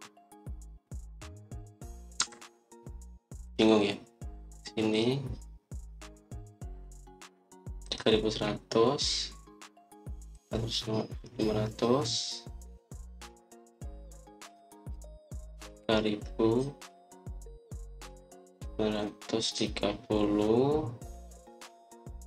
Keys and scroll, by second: 3.1 Escape.